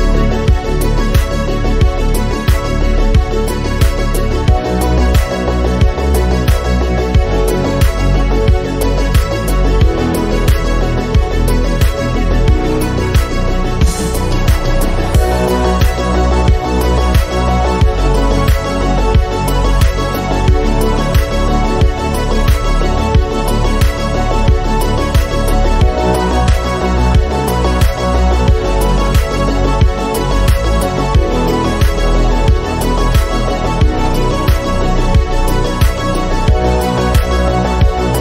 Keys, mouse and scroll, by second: 1.2 middle click, 1.9 click, 2.8 middle click, 3.0 scroll up 3, 3.4-4.7 shift+middle drag, 6.3 middle click, 6.8-10.1 drag, 12.4 middle click, 13.3 click, 13.3 middle click, 14.2-15.5 drag, 15.5 middle click, 15.6 scroll up 3, 15.8-17.6 middle drag, 18.8 middle click, 19.6 scroll down 7, 19.9 click, 20.1 middle click, 21.1 click, 22.0 scroll up 3, 22.2 KP_1, 22.6 shift+middle click, 22.7 scroll up 3, 22.9 shift+middle click, 23.2-24.3 shift+middle drag, 24.3 click, 25.5-26.1 scroll down 2, 25.7 middle click, 26.1 shift+middle click, 26.4 click, 27.6 middle click, 27.9-28.3 scroll up 2, 28.1 middle click, 28.3-28.8 scroll down 2, 28.8 g, 30.4 scroll down 4, 30.8 click, 30.9-31.3 scroll up 5, 31.3 middle click, 32.1 click, 32.2 middle click, 32.4 scroll up 1, 32.6-33.0 scroll down 7, 32.8 click, 33.0 middle click, 33.5 KP_7, 33.6 scroll up 1, 35.1 click, 35.8 scroll up 1, 35.9 scroll down 1, 36.5 scroll down 1, 37.8 scroll down 1, 38.0 middle click, 38.1 scroll up 3.